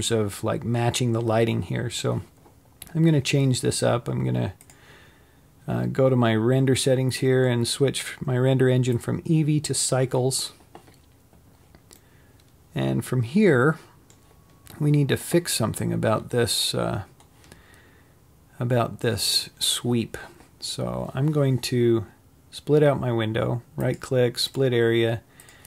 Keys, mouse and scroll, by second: 10.1-12.1 drag, 12.1-24.9 middle drag, 16.3-17.1 scroll up 3, 17.1-18.2 scroll down 3, 18.2-24.9 scroll up 1, 24.9 right click.